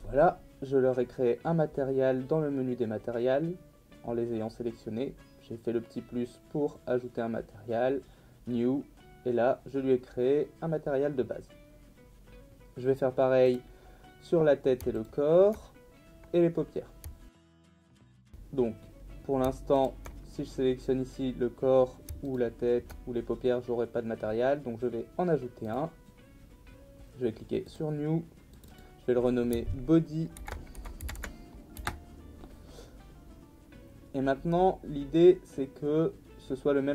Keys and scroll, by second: 30.1-31.8 typing, 31.8 Return.